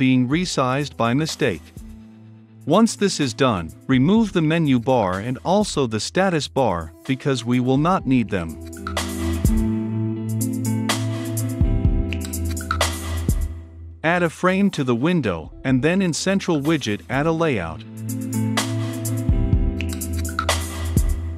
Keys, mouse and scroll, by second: 1.4 click, 2.8-4.6 drag, 14.8-16.5 drag, 18.9-21.3 scroll down 2.